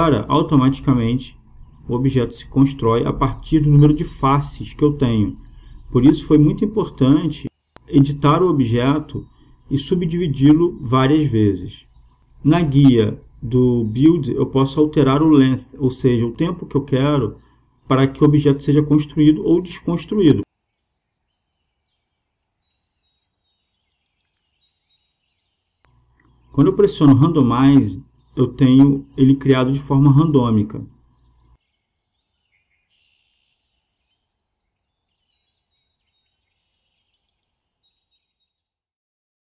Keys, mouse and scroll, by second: 1.6-3.3 drag, 8.3-9.8 middle drag, 9.8-11.6 drag, 13.9-15.8 drag, 17.6-19.3 drag, 20.5-23.7 drag, 28.2-31.1 drag, 31.0 KP_0, 32.8 click, 33.6-34.7 drag, 33.6 KP_0, 34.9-36.8 drag, 39.3 click.